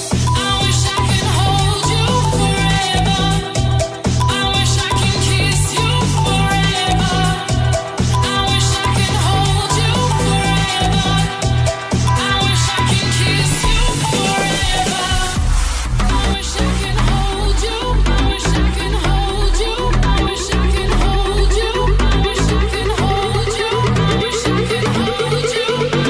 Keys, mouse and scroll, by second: 0.6 r, 1.2 g, 1.7 r, 4.0 g, 5.6 2, 6.1 alt+right click, 6.3-15.8 alt+middle drag, 11.3 Tab, 13.9 Tab, 14.9 1, 15.8 right click, 15.8-17.5 middle drag, 17.5 shift+right click, 17.5-19.8 shift+middle drag, 19.8 right click, 19.8-20.9 middle drag, 20.9 right click, 20.9-23.7 shift+middle drag, 21.3 shift+right click, 21.9 right click, 22.4 shift+right click, 23.3 right click, 24.5 g.